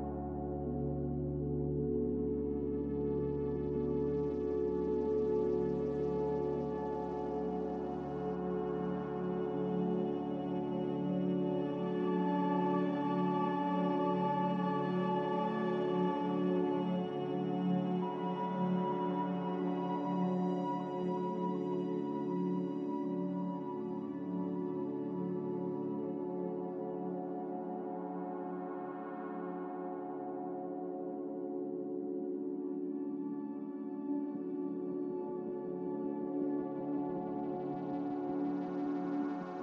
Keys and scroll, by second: 9.4 g, 15.1 z, 17.6 a, 18.3 Delete, 19.3 Delete, 21.7 z, 22.6 g, 25.3 Escape, 25.8 ctrl+z, 27.8 z, 29.9 x, 32.5 5, 33.0 5, 34.8 z, 39.4 n.